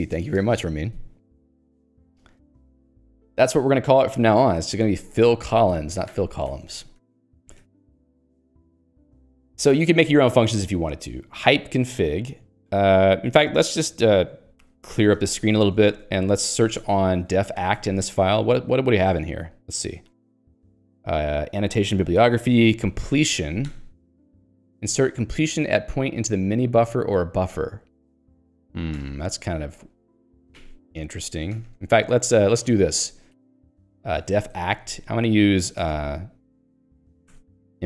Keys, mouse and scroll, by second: 2.2 click, 2.4 Escape, 2.9 ctrl+d, 4.7 Escape, 5.5 ctrl+u, 6.5 ctrl+d, 7.4 Escape, 7.6 ctrl+d, 10.5 j, 11.5 l, 16.6 ctrl+g, 17.0-18.3 typing, 18.9 ctrl+k, 19.4 ctrl+j, 20.0 ctrl+k, 23.7 ctrl+j, 29.1 ctrl+g, 30.8 ctrl+alt+j, 31.7 ctrl+g, 33.4 ctrl+s, 34.0-35.2 typing, 37.4 shift+e.